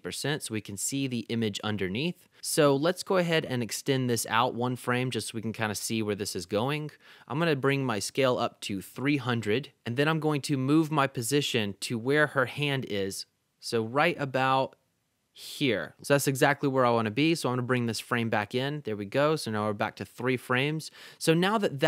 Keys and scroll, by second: 0.0-0.1 typing, 1.2 Left, 1.6 Right, 2.3 Left, 4.5 Right, 8.1-9.1 typing, 16.0 super+z.